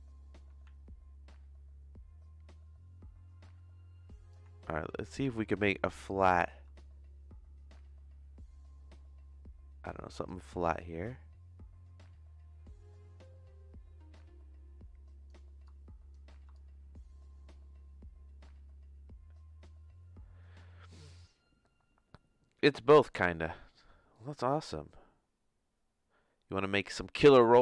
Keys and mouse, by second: 0.0-4.3 drag, 6.0 click, 6.7-10.2 shift+drag, 10.8-15.2 shift+drag, 15.7 shift+click, 16.6-21.0 shift+drag, 24.1-27.6 shift+drag.